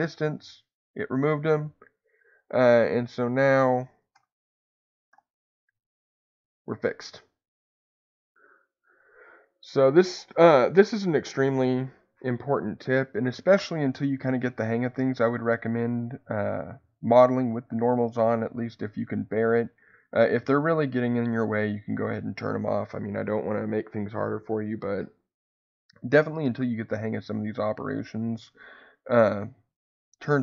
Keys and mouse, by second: 4.1 ctrl+KP_Add, 5.1 g, 9.2 Escape, 25.5 click, 28.3-29.6 drag.